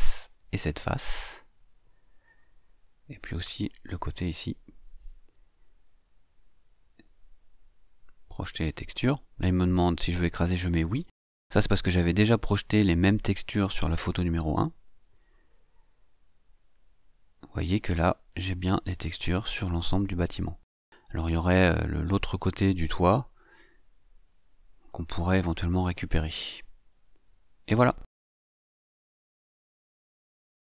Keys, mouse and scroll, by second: 2.7 shift+click, 4.3 shift+click, 7.1 shift+click, 9.0 click, 14.7 click, 16.3-19.2 drag, 19.2 middle click, 19.7-20.2 scroll down 2, 20.2 scroll up 2, 20.3-21.3 drag, 21.3-22.4 middle drag, 22.4-23.5 shift+drag, 23.5-24.8 shift+middle drag, 27.9 middle click, 28.0 click, 28.6 middle click.